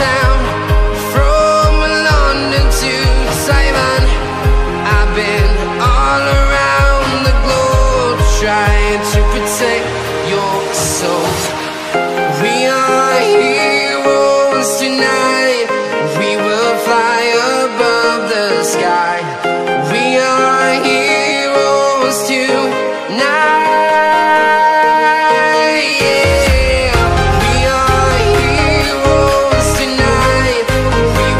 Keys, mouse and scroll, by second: 0.3 click, 2.0-5.1 typing, 7.1-8.5 typing, 9.7 click, 14.8 t, 15.3 Return, 15.7 Up, 16.9 Down, 18.6 alt+scroll down 1, 20.8 click, 23.7-24.1 scroll down 1, 24.1-24.9 scroll up 1, 24.9 click, 26.4 Delete, 26.7 click, 30.7 alt+Tab.